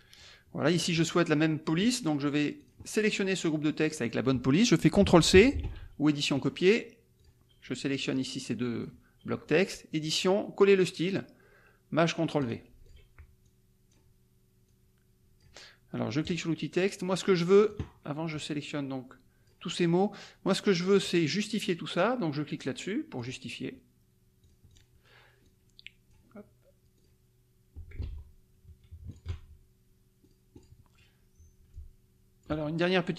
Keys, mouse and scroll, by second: 0.7 click, 2.6 click, 5.5 ctrl+c, 6.3 click, 7.1 click, 8.1 click, 10.0 click, 12.4 click, 12.9 click, 13.4 click, 14.7 click, 16.2 click, 17.6 click, 18.3-19.6 drag, 20.9 click, 22.5 click, 23.2 click, 24.4 click, 25.4 click, 26.9 click, 28.0 ctrl+z, 29.0 shift+click, 30.2 click, 31.7 click.